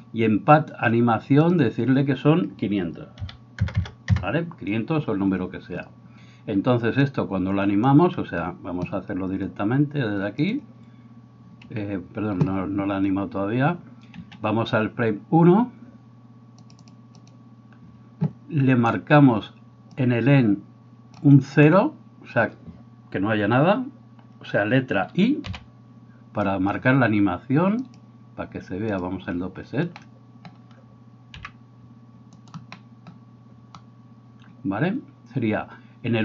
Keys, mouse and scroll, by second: 3.7 KP_0, 14.2 Escape, 32.3 middle click, 32.3 right click, 34.4-36.2 middle drag.